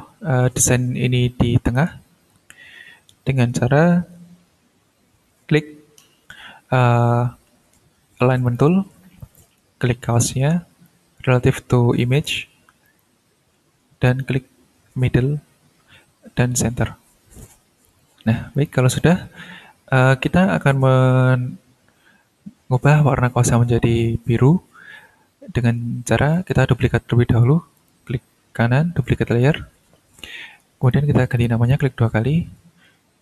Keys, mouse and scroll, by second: 8.4 click, 9.2 click, 10.8-12.2 drag, 12.8 click, 14.0 click, 17.9 click, 18.5 click, 26.3 right click, 27.3 click, 27.7 right click, 29.0 click, 30.8 click, 31.3 click, 31.7 click.